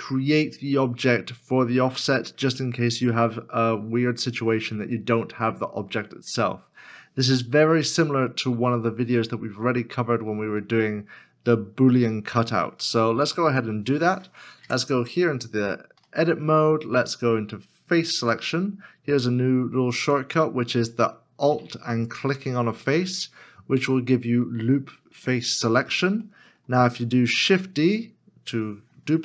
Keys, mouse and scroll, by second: 14.6 Tab, 15.4 scroll up 1, 16.2 shift+middle click, 16.8 scroll up 1, 18.2 3, 20.0 scroll up 1, 22.0 alt+click, 23.8 middle click, 25.5 scroll down 1, 26.3 middle click, 27.3 shift+d.